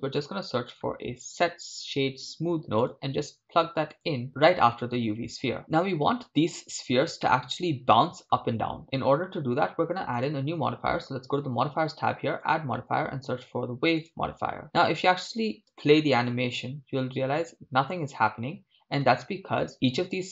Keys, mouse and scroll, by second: 6.6 scroll down 3, 7.3-10.2 middle drag, 10.2 click, 15.8 shift+space, 19.0 shift+space.